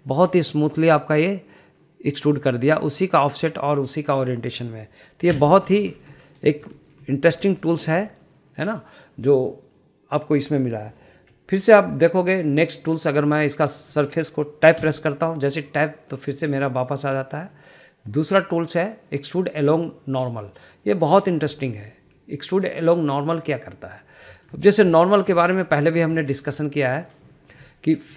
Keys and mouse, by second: 0.0 middle click, 1.1 middle click, 1.5 middle click, 3.0 middle click, 6.5 Tab, 7.3 middle click, 7.9 shift+middle click, 8.2 middle drag, 8.6 shift+middle click, 9.2 shift+middle click, 9.5 shift+middle click, 11.5 middle click, 14.2 click, 15.1 middle click, 15.9 Tab, 18.4 middle click, 19.5-25.2 drag, 25.7 shift+middle click, 26.0 middle drag, 26.5 shift+middle click, 26.8 middle drag, 27.3 shift+middle drag, 27.7-28.0 middle drag.